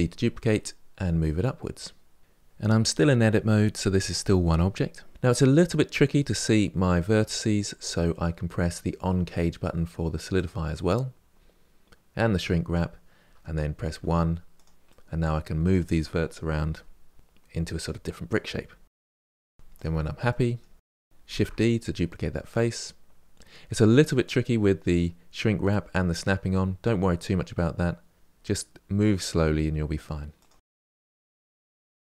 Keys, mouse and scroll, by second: 3.2 Tab, 3.5-4.5 middle drag, 4.5 Tab, 5.1-6.6 middle drag, 10.1 click, 12.1 click, 13.7 1, 14.3 click, 14.6 middle click, 15.1 click, 15.6 g, 16.6 click, 16.7 g, 17.4 middle click, 17.9 click, 17.9 g, 18.5 click, 18.6 g, 20.1 3, 20.3 click, 20.6 middle click, 21.1 shift+d, 30.3 1, 30.4 click, 30.5 middle click, 30.9 g, 31.5 click, 31.5 g, 31.9 click, 31.9 g.